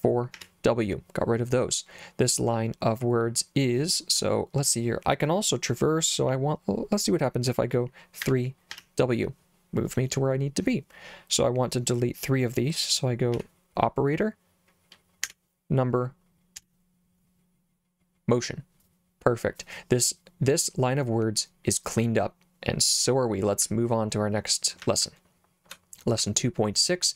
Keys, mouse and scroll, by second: 0.4 w, 8.3 3, 8.7 w, 13.4 d, 15.3 3, 16.6 w, 23.7 j, 24.9 j, 25.1 j, 26.2 j.